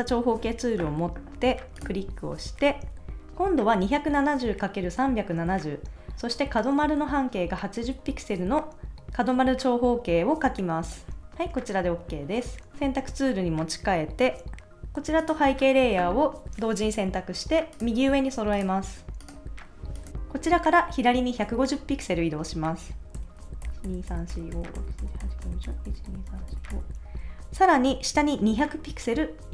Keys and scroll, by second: 23.6 shift+Left.